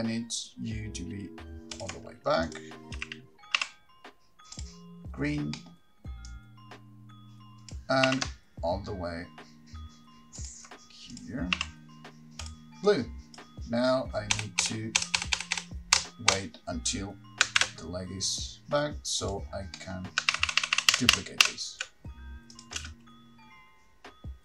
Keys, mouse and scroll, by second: 2.0 ctrl+click, 2.6 click, 4.8 t, 4.8 r, 6.5 middle click, 6.5 click, 6.5 scroll up 6, 8.3 r, 10.7 ctrl+click, 11.3 click, 12.7 r, 13.1 click, 14.5 Right, 14.8 Right, 15.2 Right, 15.4 Right, 15.6 Right, 15.8 Right, 16.2 Right, 16.5 Right, 17.8 shift+d, 19.5 click, 20.5 middle click, 20.5 scroll down 8, 20.5-21.6 typing, 22.7 click, 23.0 space.